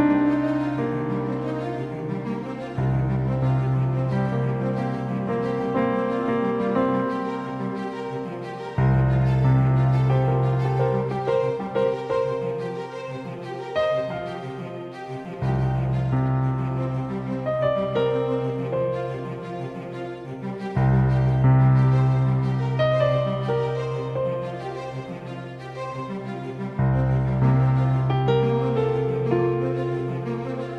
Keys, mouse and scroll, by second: 2.5-4.9 drag, 5.0 g, 8.1-9.4 middle drag, 10.8-13.2 right drag, 12.1-14.5 drag, 15.3-19.2 right drag, 17.2-20.5 drag, 21.5-23.8 drag, 24.8-27.0 drag, 26.0 shift+a, 30.6 s.